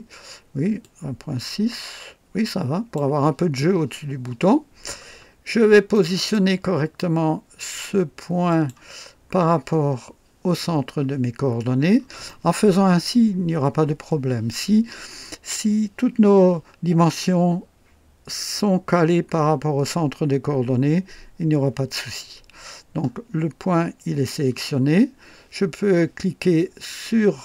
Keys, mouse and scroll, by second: 0.8-3.1 drag, 5.1 scroll down 1, 5.7-6.7 typing, 5.9 right click, 8.5 click, 8.6-12.8 typing, 9.0-9.4 scroll down 1, 11.5 scroll up 1, 12.2-12.9 right drag, 23.0-23.3 scroll up 2, 24.6-25.0 scroll down 2.